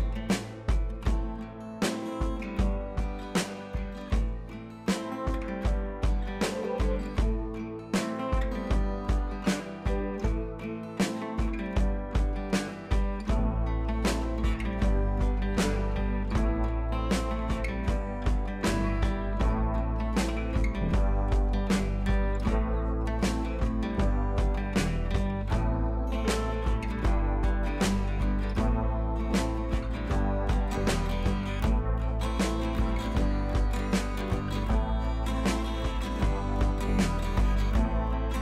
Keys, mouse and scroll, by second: 1.0 click, 2.0 ctrl+d, 2.8 scroll down 1, 5.3-5.9 scroll up 1, 6.2 u, 7.2-9.0 drag, 24.3 click, 28.4-34.0 drag, 30.0-31.3 drag, 33.2 click, 35.3 ctrl+j, 36.4 click.